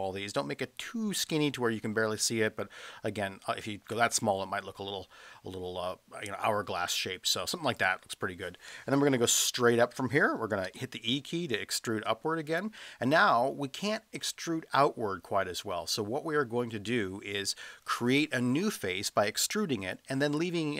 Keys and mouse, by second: 7.7 click, 10.7 e, 12.5 click.